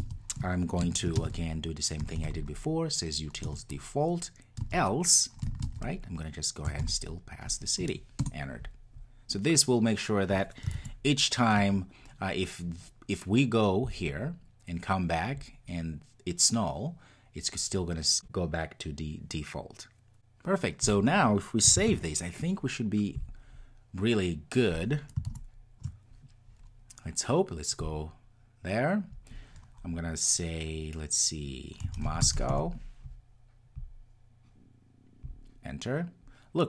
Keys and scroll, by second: 3.4 Return, 8.1 Return, 11.5 Return, 21.7 super+s, 23.1 ctrl+r.